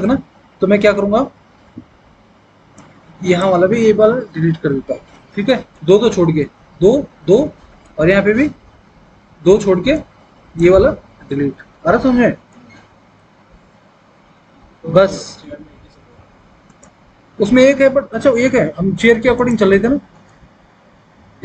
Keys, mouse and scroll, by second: 4.6 Delete, 11.6 Delete.